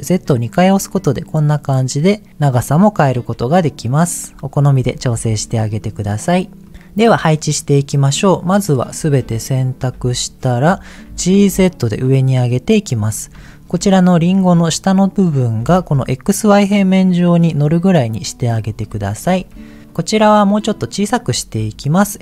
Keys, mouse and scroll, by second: 4.6 click, 5.1 Tab, 5.7 click, 6.2 middle click, 7.3 middle click, 8.1 click, 10.0 KP_1, 11.0 g, 11.3 z, 12.7 click, 12.9-13.3 scroll up 2, 13.4 shift+middle click, 15.5 g, 15.7 z, 18.0 click, 18.5-18.8 scroll down 2, 19.0 shift+middle click, 19.7 click, 20.1 click, 21.5 s.